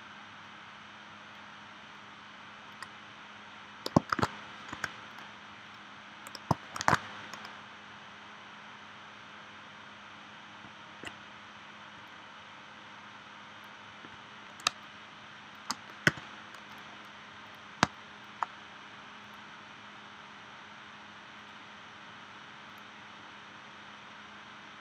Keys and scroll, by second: 4.1 shift+w, 4.8 v, 6.8 shift+w, 14.7 space, 16.1 v, 17.8 space.